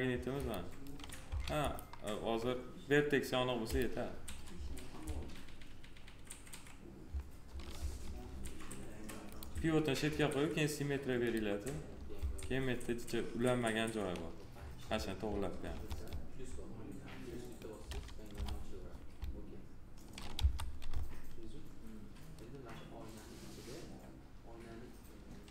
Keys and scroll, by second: 1.1 s, 7.7 F3, 12.1 F3, 15.8 F3, 18.2 p, 20.3 F4.